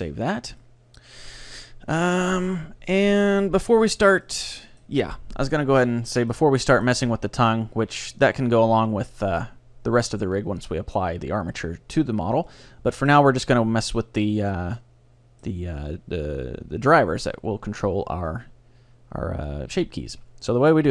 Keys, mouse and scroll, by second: 1.2-2.6 middle drag, 2.8-4.3 scroll up 1, 4.3-6.3 middle drag, 6.4-9.3 middle drag, 12.5-13.5 middle drag, 13.5-15.1 right drag, 13.9 middle click, 14.8-16.6 middle drag.